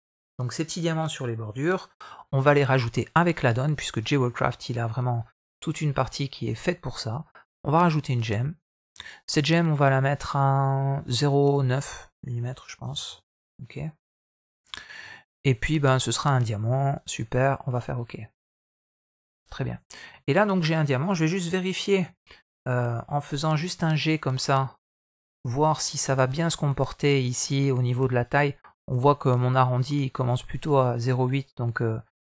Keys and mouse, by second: 3.8 click, 4.2-5.5 middle drag, 8.4-19.1 drag, 19.5 middle drag, 20.1 middle click, 21.8 KP_3, 23.3 g, 26.0 middle drag, 30.9 click.